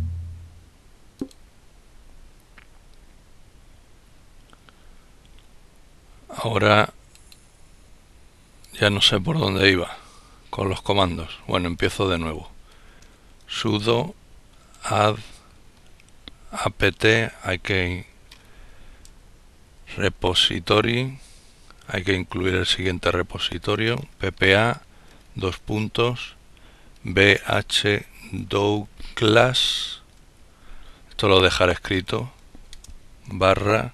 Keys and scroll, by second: 11.7-14.8 typing, 15.9-24.1 typing, 25.9-29.7 typing, 30.8-32.4 typing.